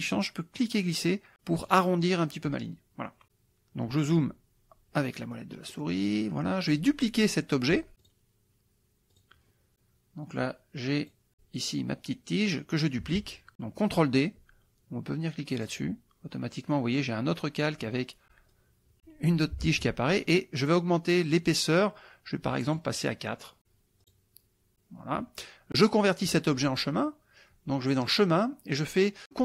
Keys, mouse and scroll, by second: 0.6-1.9 drag, 3.2 click, 5.2 middle click, 5.7 middle click, 6.1 middle click, 8.1 click, 9.1 click, 11.1 click, 15.6 click, 18.5-19.7 drag, 19.7 ctrl+z, 22.7 right click, 24.0 click, 28.2 click.